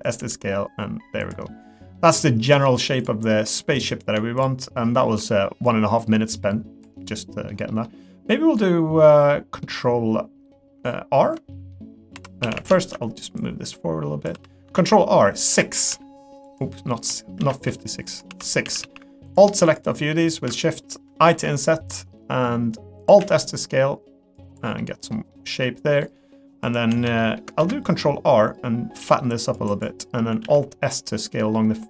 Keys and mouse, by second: 0.2 g, 1.4 middle click, 2.4 click, 3.0 ctrl+click, 3.7 ctrl+click, 5.7-6.8 drag, 7.0 middle click, 7.7 middle click, 8.3-9.6 middle drag, 11.5 middle click, 12.1 2, 12.4 a, 12.8 shift+click, 13.4 click, 14.3 3, 14.7 ctrl+r, 18.3 3, 18.4 middle click, 18.6 a, 20.6 middle click, 21.3 i, 23.2 alt+s, 24.8 middle click, 25.3 middle click, 26.0 middle click, 27.2 middle click, 27.6 ctrl+r, 30.4 alt+s.